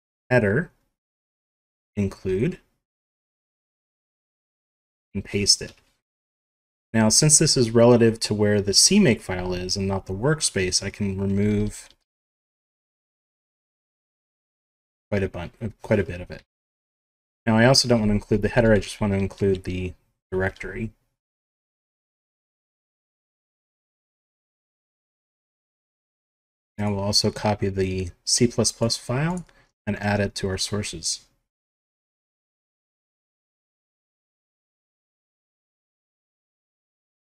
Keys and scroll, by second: 4.6 ctrl+v, 5.5 Home, 10.6 shift+Right, 11.9 ctrl+shift+Right, 13.4 Delete, 13.8 Delete, 16.2 End, 18.2 ctrl+shift+Left, 18.9 ctrl+shift+Left, 19.0 ctrl+shift+Right, 20.4 Delete, 21.4 Home, 21.5 Home, 23.0 shift+Down, 23.5 ctrl+c, 36.7 Home, 37.0 ctrl+v.